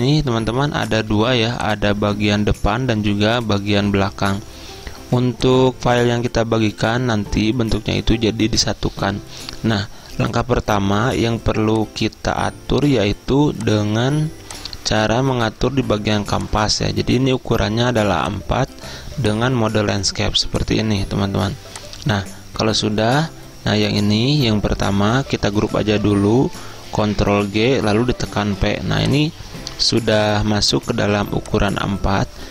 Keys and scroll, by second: 1.1 z, 27.0 ctrl+g, 28.0 p.